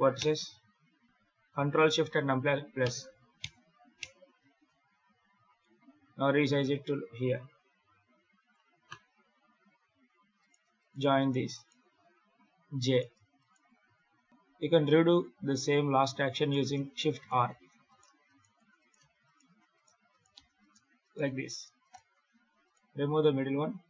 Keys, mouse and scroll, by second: 5.3-5.9 scroll down 9, 5.8 s, 9.0-9.7 scroll up 2, 9.7-10.3 scroll up 3, 10.3 right click, 10.7 shift+right click, 11.1 right click, 11.4 shift+right click, 12.1 j, 12.8 right click, 13.3 shift+right click, 13.5 shift+r, 14.8 scroll up 3, 16.2 right click, 17.1 shift+right click, 17.4 shift+r, 17.7 right click, 18.1 shift+right click, 18.4-22.9 typing, 18.7 right click, 19.1 shift+right click, 19.6 right click, 20.0 shift+right click, 20.5 right click, 20.9 shift+right click, 21.4 right click, 21.7 shift+right click, 22.5 right click, 23.5 scroll down 4.